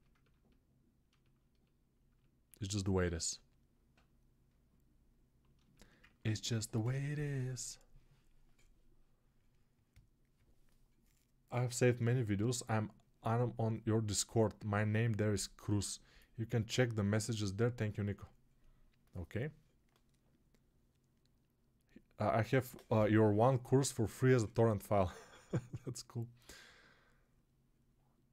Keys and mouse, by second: 0.4 right click, 0.5 alt+click, 1.0-3.3 alt+shift+right drag, 3.3 click, 3.4-5.5 alt+right drag, 5.5 alt+shift+click, 6.4-28.3 right drag.